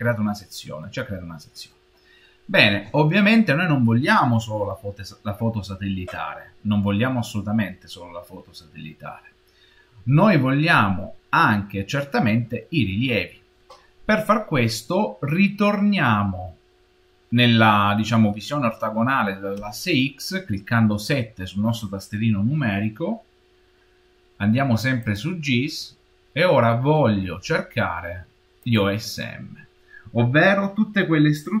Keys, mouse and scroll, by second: 0.0 shift+middle click, 4.5 middle click, 7.3-8.1 scroll down 3, 8.1-9.0 scroll up 1, 9.0 middle click, 19.4 KP_7, 24.9 click.